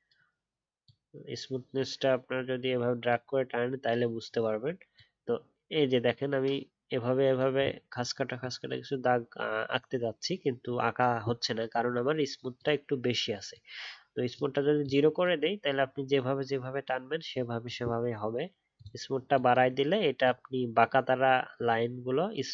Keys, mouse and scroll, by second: 4.3-5.0 alt+scroll up 1, 7.8-10.3 alt+scroll up 1.